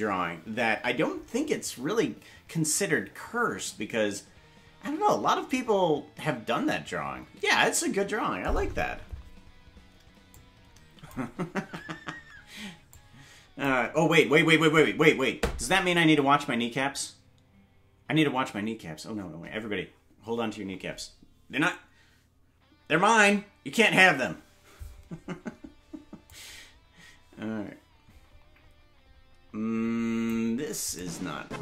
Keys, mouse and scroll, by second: 10.3 click, 12.1 ctrl+z, 12.9 click, 14.5 ctrl+z, 26.2-30.3 drag, 30.9 right click.